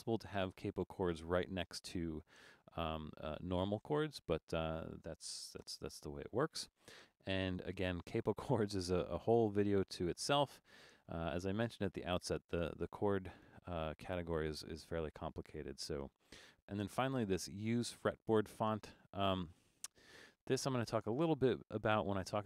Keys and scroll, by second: 5.6 Return.